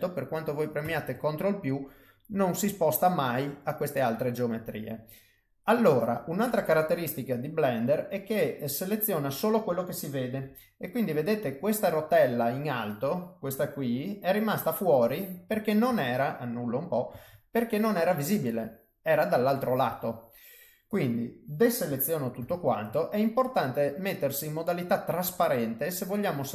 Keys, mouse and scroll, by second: 0.8 ctrl+z, 1.4 middle click, 10.4 g, 13.5 click, 15.8 ctrl+z, 17.1 ctrl+z, 17.9 middle click, 19.9 middle click, 22.4 alt+a, 22.9 middle click.